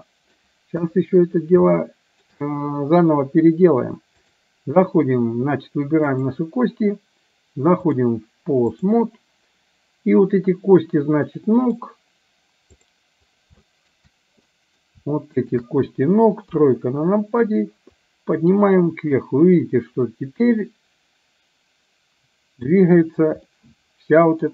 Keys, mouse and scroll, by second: 0.8 KP_1, 1.8-2.3 shift+middle drag, 4.5-5.4 drag, 8.0-9.1 drag, 11.3-11.8 middle drag, 12.9 click, 13.8 shift+middle click, 14.5-14.9 middle drag, 15.5 shift+click, 16.5 KP_3, 18.3-22.9 drag, 23.6-24.5 middle drag.